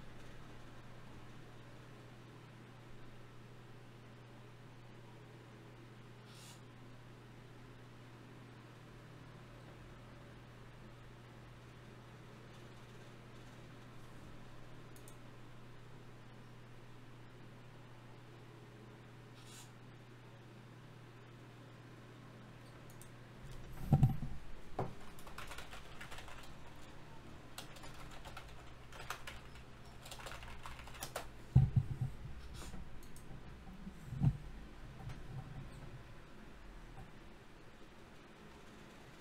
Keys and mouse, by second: 1.1-2.8 middle drag, 3.6-4.8 middle drag, 5.8 ctrl+r, 7.4 ctrl+r, 10.6 click, 11.1-12.2 drag, 12.2 middle click, 12.6 click, 12.6 g, 13.2 middle click, 14.0 click, 14.2-15.7 middle drag, 14.2 g, 15.7 g, 16.9 g, 17.9 g, 20.3 g, 21.3 g, 22.3 g, 26.6 middle click, 27.3-32.9 right drag, 28.1 g, 29.5 g, 31.1 g, 32.9-34.0 drag, 32.9 g, 34.4 Tab, 35.2-38.6 drag, 36.9 Tab.